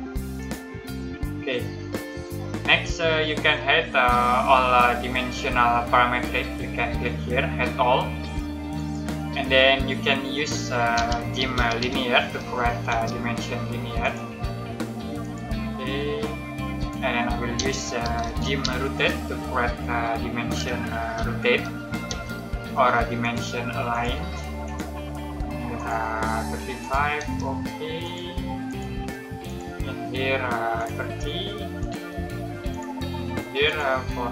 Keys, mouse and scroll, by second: 0.3 click, 2.6 middle click, 8.7 click, 9.6 middle click, 10.6-12.8 typing, 13.9 click, 17.2-19.0 typing, 21.1 o, 22.0 space, 23.1 click, 27.1 space, 27.9 click, 32.0 space, 32.6 click.